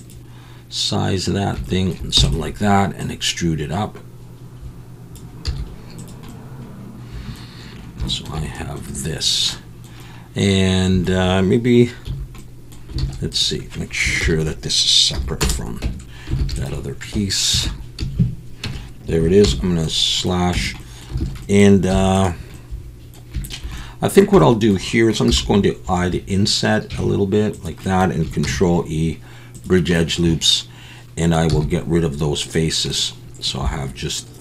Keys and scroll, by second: 2.2 e, 5.4 z, 12.1 a, 13.0 alt+a, 14.2 ctrl+l, 15.4 p, 15.8 Tab, 16.4 alt+a, 17.7 Tab, 18.0 a, 18.6 Tab, 19.4 /, 20.5 Tab, 21.2 alt+a, 21.9 3, 25.3 i, 28.5 ctrl+e, 31.5 x.